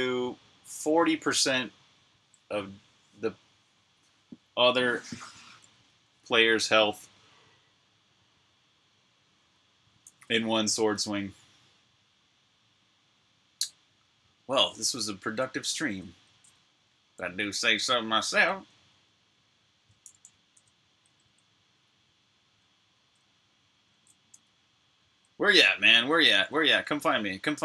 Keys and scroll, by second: 14.6-19.4 typing, 20.7-21.4 typing, 22.5-27.6 typing.